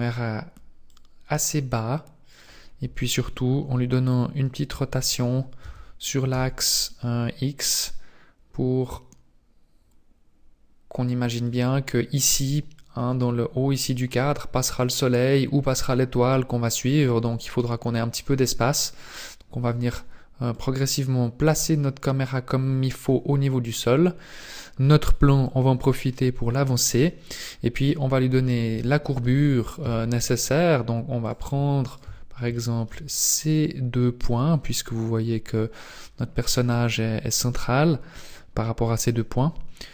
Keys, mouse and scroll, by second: 0.8 click, 5.6 r, 5.6 r, 13.1-16.4 scroll up 2, 19.0 click, 20.5 click, 23.3-24.1 scroll down 9, 24.3 right click, 25.4 click, 27.5 scroll down 1, 27.8 middle click, 28.8 shift+middle click, 29.8 Tab, 31.2 right click, 31.9 shift+right click, 32.5 shift+middle click, 33.3-33.7 scroll up 4.